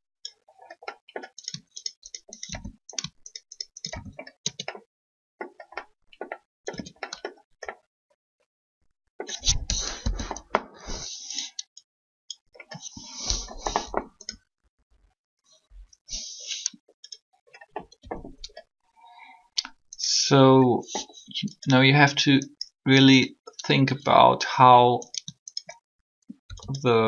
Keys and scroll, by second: 4.4 shift+Tab, 6.7 Tab, 9.7 1, 15.5 3, 17.6-18.0 typing, 26.3 shift+e.